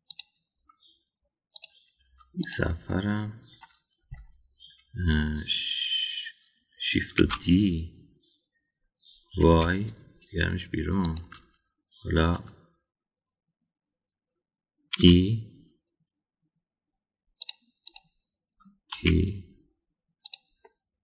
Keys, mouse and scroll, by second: 3.3 click, 3.8 middle click, 8.2 shift+d, 16.0 e, 18.9 click, 19.9 e.